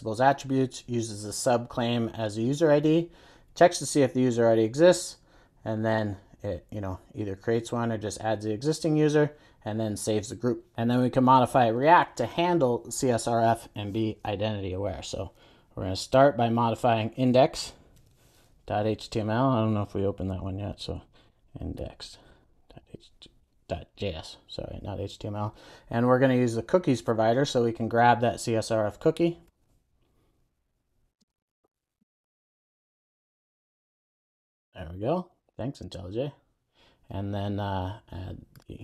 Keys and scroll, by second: 18.1 super+e, 20.5 shift+super+o, 33.8 Return.